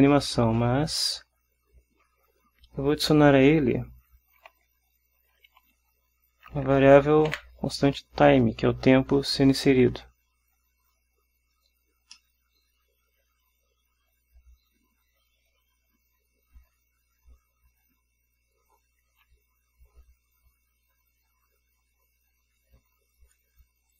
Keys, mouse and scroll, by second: 3.2 click, 4.6 shift+=, 5.5 shift+t, 5.6 shift+i, 5.9 shift+m, 7.4 shift+e, 12.3-17.0 drag, 22.3 Right.